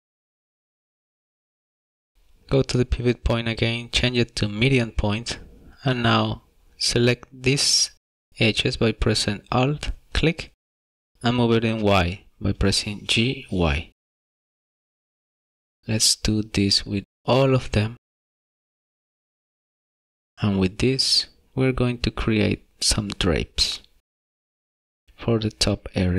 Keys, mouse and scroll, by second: 4.6 shift+middle click, 6.2 click, 10.7 alt+click, 11.1 middle click, 11.5 shift+middle click, 12.2 middle click, 13.7 g, 13.9 y, 16.1 g, 19.5 alt+click, 21.2 g.